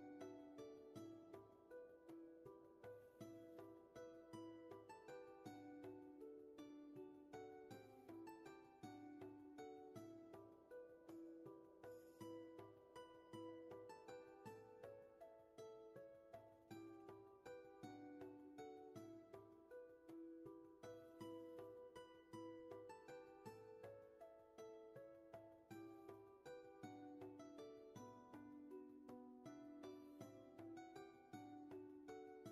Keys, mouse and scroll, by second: 2.7 ctrl+z, 10.0 ctrl+z, 12.8 ctrl+z, 16.6 space, 26.4 ctrl+z, 28.8 ctrl+z.